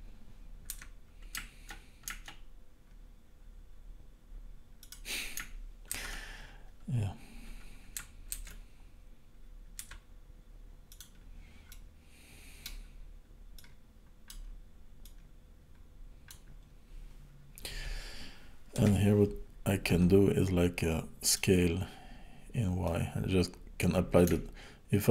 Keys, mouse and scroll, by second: 5.9 ctrl+z, 8.4 alt+d, 11.7 middle click, 13.6 click, 13.6-14.7 scroll down 1, 15.0 click, 18.8 KP_7, 21.3 click, 22.8 click.